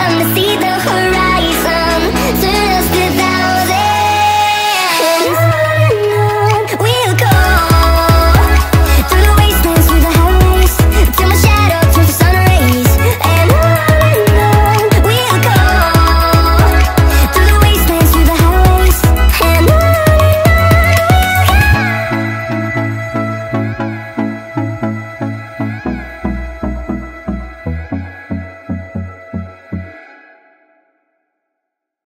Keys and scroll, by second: 4.5-5.5 [, 16.3 alt+Tab.